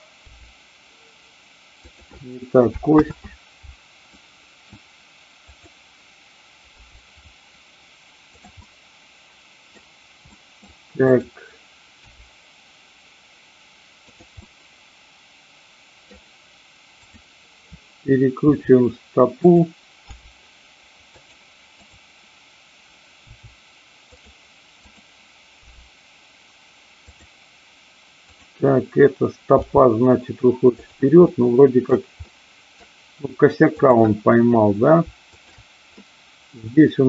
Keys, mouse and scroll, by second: 0.3 g, 1.7 click, 3.0 ctrl+z, 4.1-4.6 middle drag, 5.6 click, 6.7 g, 8.3 click, 8.5-9.7 middle drag, 10.3 middle click, 11.9 click, 12.2 g, 14.1 click, 14.3-16.0 middle drag, 17.0-18.0 drag, 18.5 r, 19.3 click, 20.1 g, 21.1 click, 21.7-22.7 drag, 23.2 r, 24.1 click, 25.7 g, 27.1 click, 28.2 click, 29.6 g, 30.9 click, 31.3-32.0 scroll up 1, 32.3 scroll up 1, 32.3 middle click, 33.7-34.9 drag, 35.3 shift+click, 36.0-37.0 middle drag.